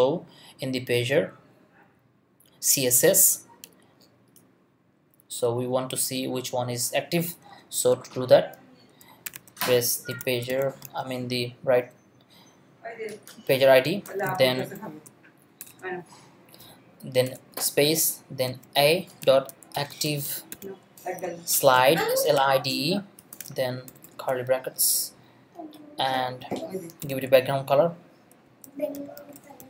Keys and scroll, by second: 7.5 Return, 9.2-11.3 typing, 14.3 shift+space, 14.6 shift+[, 14.7 shift+], 15.6 shift+BackSpace, 17.2-24.0 typing, 24.7 shift+Left, 25.3 Left, 26.8-29.6 typing.